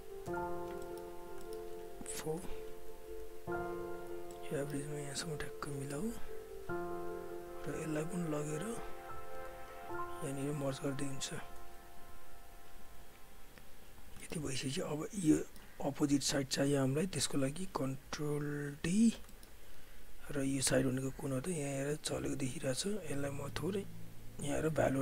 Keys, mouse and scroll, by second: 0.8 alt+middle click, 1.1 alt+right click, 1.4 alt+middle click, 1.6 alt+right click, 2.1 4, 2.5 alt+right click, 3.5 click, 4.1-5.2 typing, 4.3 middle click, 6.3 alt+click, 6.7 right click, 7.6 click, 7.8-8.9 typing, 8.5 click, 9.6 alt+click, 10.8 shift+right click, 12.1 alt+click, 13.0 right click, 13.7 click, 14.0 alt+right click, 14.2 alt+middle click, 14.4 alt+click, 15.4 alt+middle click, 16.1 alt+click, 17.0 alt+right click, 17.2 alt+click, 18.7 ctrl+d, 19.3 alt+middle click, 19.7 r, 20.8-22.6 drag, 22.6 ctrl+z, 23.5 Delete, 23.8 click.